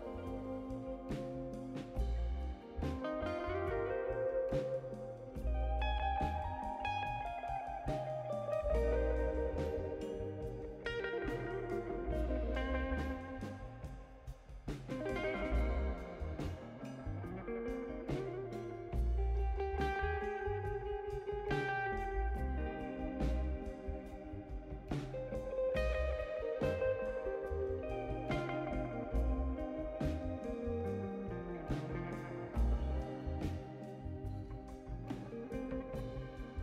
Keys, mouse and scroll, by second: 0.2 right click, 1.0 middle click, 7.7 click, 11.0 click, 13.4 click, 17.4 click, 19.6 5, 21.0 click, 24.6 click, 25.6 click, 26.1-28.3 typing, 29.4 click, 34.4 click, 35.3 click.